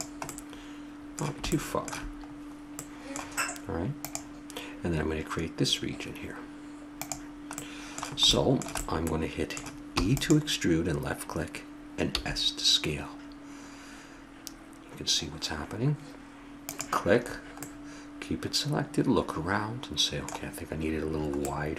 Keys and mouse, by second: 1.1 middle click, 7.7 middle click, 10.0 e, 12.3 s, 17.3 middle click, 17.8 middle click.